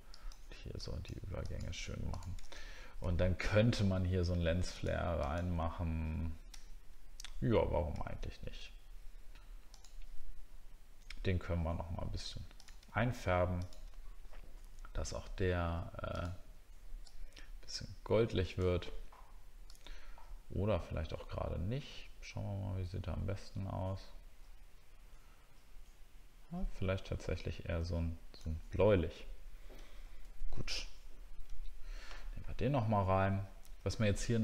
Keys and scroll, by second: 2.7 alt+scroll down 1, 28.8 alt+scroll up 1, 29.9 alt+scroll down 1, 33.9-34.4 alt+scroll up 1.